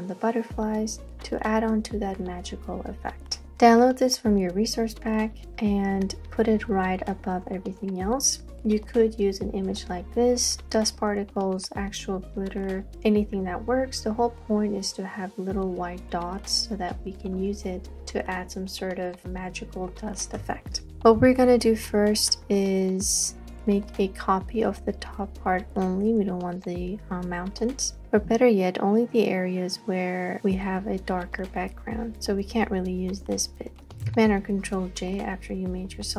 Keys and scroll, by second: 34.1 super+j.